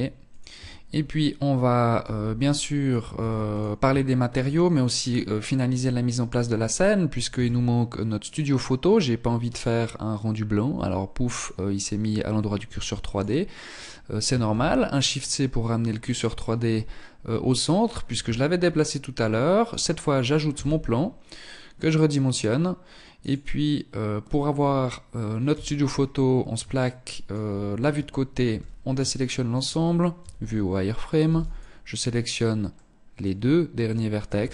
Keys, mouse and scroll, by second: 0.0-1.1 scroll down 6, 1.1 z, 1.7 middle click, 2.3 ctrl+s, 3.1 shift+middle click, 3.9-4.3 scroll down 6, 4.7-5.9 scroll up 5, 6.5 shift+a, 11.9 x, 13.6 shift+c, 14.3-15.0 scroll up 3, 15.2 scroll up 2, 17.3 shift+a, 19.7 s, 24.6 KP_3, 25.3-25.6 scroll down 3, 25.9 shift+middle click, 26.7-27.2 scroll down 2, 27.1 Tab, 27.6 a, 28.3 shift+middle click, 29.3 z, 30.4 b, 31.9 middle click, 33.5 KP_3.